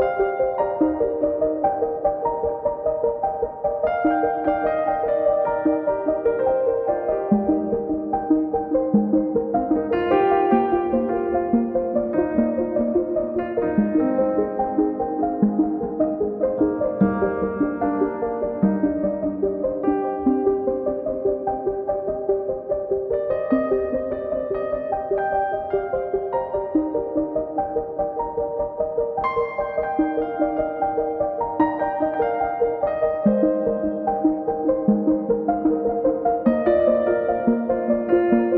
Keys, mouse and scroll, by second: 0.4 alt+shift+click, 2.6 super+middle click, 3.6 shift+middle click, 5.8 shift+middle click, 8.0 middle click, 13.7 alt+shift+click, 17.2 shift+u, 20.8 click, 22.4 shift+click, 22.8 shift+click, 23.4 shift+click, 25.1 shift+click, 25.5 shift+click, 27.1 shift+click, 27.6 shift+click, 28.5 shift+click, 31.6 shift+click, 32.8 shift+click, 33.3 shift+click, 35.2 shift+click, 35.7 shift+click, 36.1 shift+click, 36.7 shift+click.